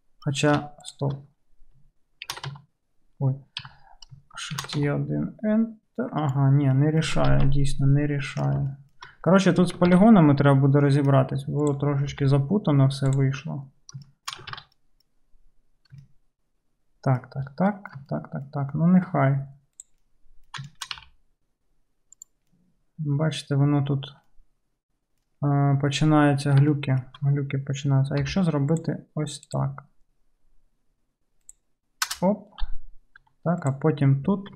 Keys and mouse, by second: 0.9 shift+click, 2.3 shift+e, 2.5 shift+e, 2.6 1, 3.7 j, 4.6 shift+e, 7.4 ctrl+z, 9.9 ctrl+z, 11.6 click, 11.8-14.5 middle drag, 12.2 g, 14.6 g, 14.6 alt+z, 14.6-19.8 alt+middle drag, 19.8 click, 19.9-34.5 middle drag, 21.0 g, 28.3 k, 33.3 2.